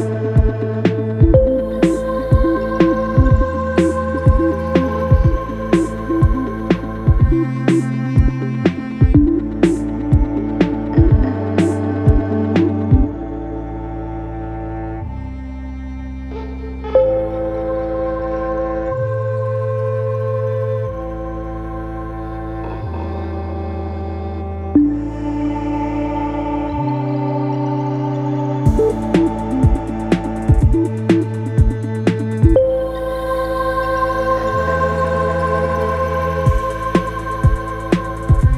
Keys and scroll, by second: 4.2 2, 5.8 4, 7.0 Return, 7.5 Return, 10.1 3, 12.0 ], 12.5 Escape, 19.9 4, 21.3 F1, 21.4 F2, 21.7 F1, 26.6 F1, 29.1 F1, 30.2 ctrl+d, 30.4 Escape, 37.4 ctrl+d, 37.6 Escape.